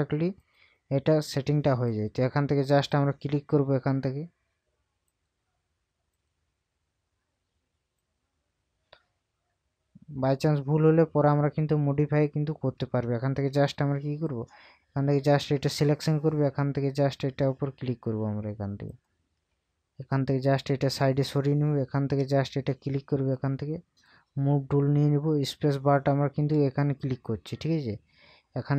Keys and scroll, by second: 13.5 space, 19.5 space.